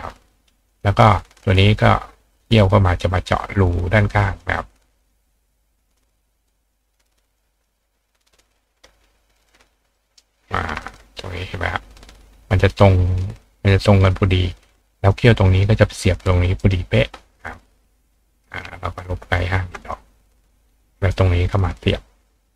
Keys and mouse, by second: 0.7 click, 1.1-1.4 drag, 3.6 click, 5.0 click, 5.9 click, 6.5 drag, 7.4 drag, 8.4-10.2 drag, 9.9 ctrl+right click, 10.8 click, 13.1 click, 13.7 click, 16.6 right click, 18.1 click, 18.5 click, 19.3 click, 19.8 click, 20.7-21.1 drag.